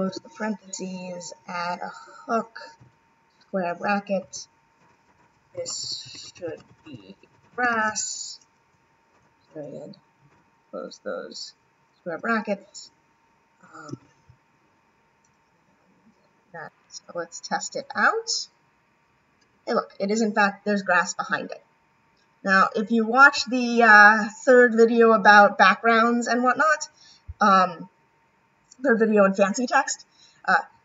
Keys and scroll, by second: 10.3 ], 16.6 ].